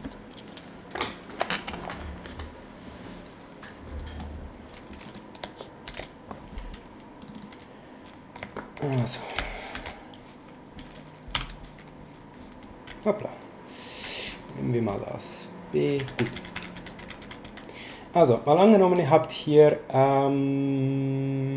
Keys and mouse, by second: 5.1 click, 5.9 ctrl+n, 7.2 click, 9.7 ctrl+shift+n, 11.3 b, 12.9 s, 14.9 click, 16.0 s.